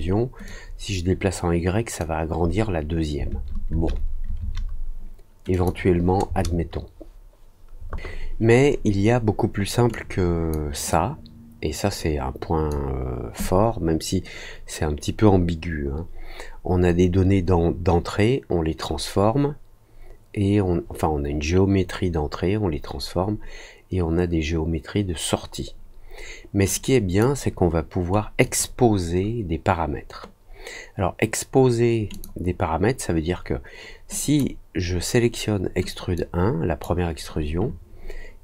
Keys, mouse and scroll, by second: 0.4-1.9 drag, 5.5 click, 9.9 click, 10.8-12.6 drag, 26.7 click, 28.4 click, 32.1 click, 34.1 click, 36.1-36.8 drag.